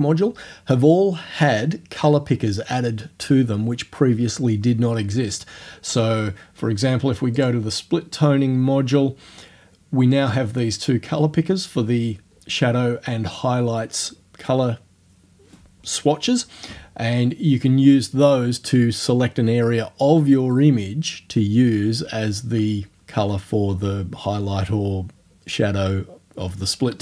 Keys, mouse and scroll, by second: 7.4 click.